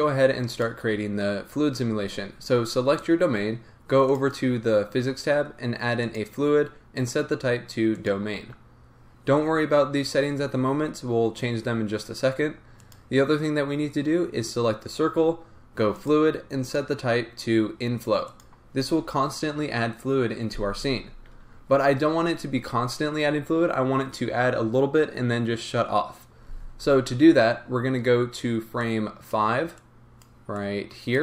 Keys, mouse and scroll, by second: 0.5 click, 4.1 click, 6.0 click, 6.9-12.9 drag, 9.1-11.3 scroll down 2, 11.3-12.8 scroll down 1, 16.0-31.2 drag, 21.7-25.8 scroll up 2.